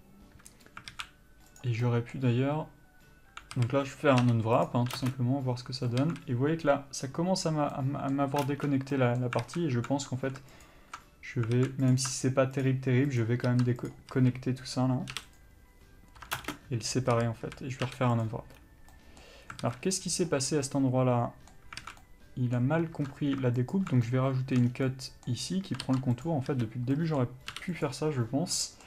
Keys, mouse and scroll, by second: 1.1 alt+a, 1.7 click, 2.1-5.2 middle drag, 3.8 a, 4.9 u, 5.2 ctrl+space, 6.2 alt+a, 8.0 middle click, 8.7 ctrl+space, 8.7-10.8 middle drag, 9.6 alt+a, 10.8 ctrl+alt+click, 11.8 alt+a, 12.1-12.6 drag, 14.1 ctrl+e, 14.3 a, 15.6 u, 16.6 ctrl+space, 17.3 a, 18.5 u, 19.8 alt+a, 20.9 middle click, 22.0 alt+a, 22.2 middle click, 24.0 alt+shift+click, 24.3 shift+middle click, 24.9 scroll down 1, 25.1 middle click, 26.5 ctrl+e, 26.7 a, 27.1 middle click, 28.1 u.